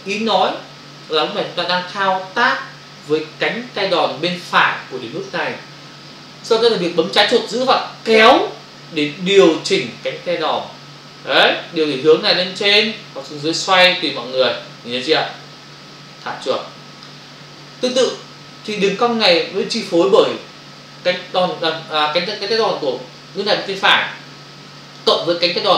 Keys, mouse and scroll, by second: 7.8 alt+click.